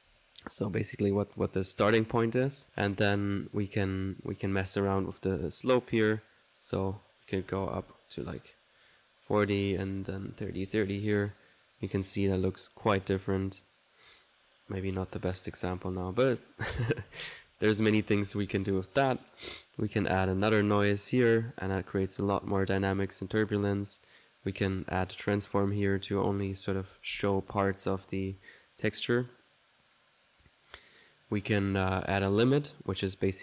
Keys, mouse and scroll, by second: 0.5 typing, 1.2-2.3 middle drag, 2.3 click, 2.4-3.2 typing, 2.7 click, 3.3 middle click, 4.0 click, 4.8 click, 5.1 click, 5.5-10.7 drag, 11.1 1, 17.1 ctrl+z, 18.0-19.1 typing, 18.6 ctrl+click, 19.3 click, 20.5 click, 24.0-28.2 drag, 31.7 click, 32.5 click.